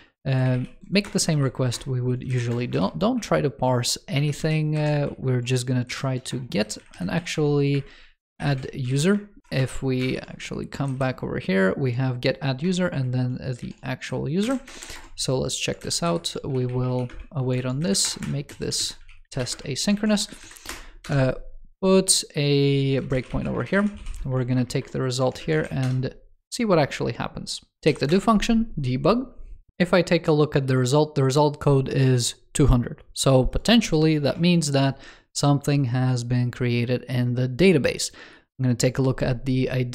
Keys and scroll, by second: 8.8 super+s, 10.0 shift+super+[, 12.8 shift+super+], 13.5 super+d, 14.5 alt+BackSpace, 15.7 super+Left, 17.9 super+Return, 18.7 super+Left, 19.8 super+s, 25.5 super+s, 34.1 super+7.